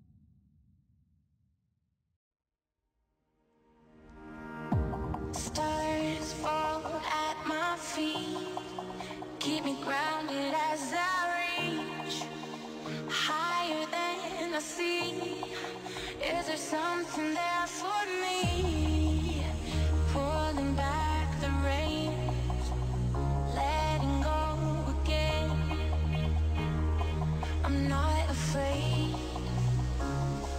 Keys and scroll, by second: 8.9 ctrl+s, 15.5 c, 16.3 r, 17.0 Return, 18.6 ctrl+space, 19.3 c, 20.1 r.